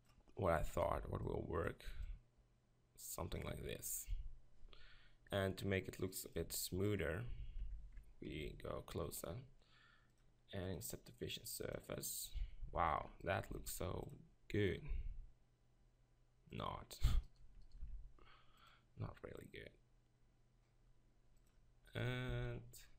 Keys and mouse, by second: 0.7 right click, 0.9 b, 3.5 Tab, 6.4 Tab, 7.6 Tab, 8.2 ctrl+KP_Decimal, 11.4-12.3 drag, 12.3 Tab, 12.6 z, 13.6 ctrl+r, 16.7-17.8 drag, 17.2 right click, 17.8 ctrl+r, 22.3 ctrl+r.